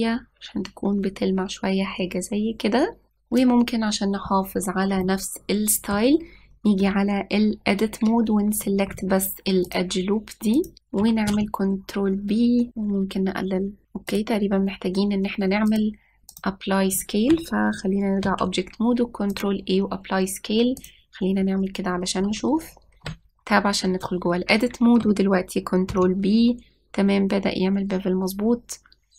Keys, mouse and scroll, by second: 0.4-3.1 drag, 5.4 scroll up 2, 5.9-7.7 shift+middle drag, 7.7 Tab, 10.5 alt+click, 12.1 ctrl+b, 16.5-19.1 drag, 19.1 ctrl+a, 21.7 click, 23.9 Tab, 26.7 ctrl+b.